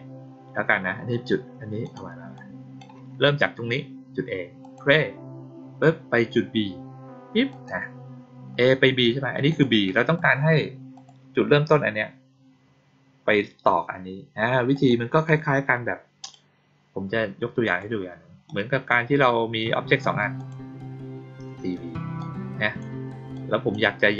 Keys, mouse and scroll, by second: 1.8 click, 2.3-2.7 drag, 4.5 click, 7.4 click, 9.4 click, 10.1 click, 10.9 click, 14.7 click, 16.1 click, 17.6 click, 18.4 click, 20.3 click, 22.1 click, 23.3 click.